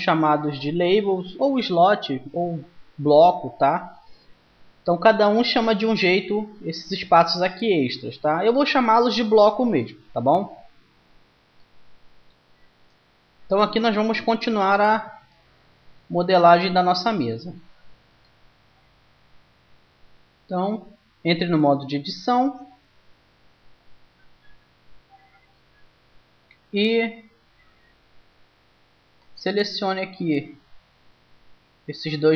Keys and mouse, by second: 18.2-19.9 right drag, 20.3 Tab, 23.7-28.9 middle drag, 28.9-30.7 drag, 31.7-32.3 drag.